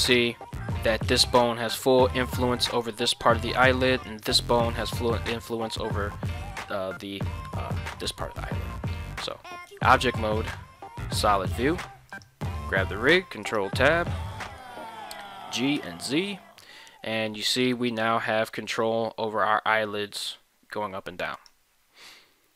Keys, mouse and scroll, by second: 1.2 right click, 4.1 right click, 8.9 ctrl+Tab, 10.3 z, 12.1 right click, 12.9 ctrl+Tab, 13.6 right click, 14.4 shift+middle click, 15.2 g, 15.8 z, 21.3 right click.